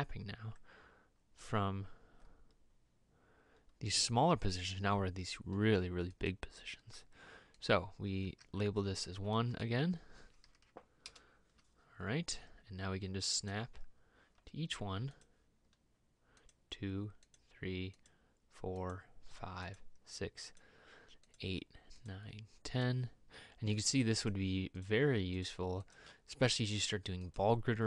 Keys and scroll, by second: 8.5 e, 9.9 1, 11.3 Return.